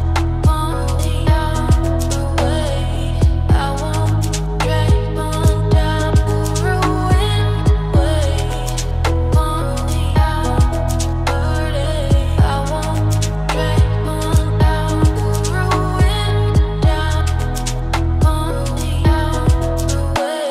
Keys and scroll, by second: 4.7 ctrl+d.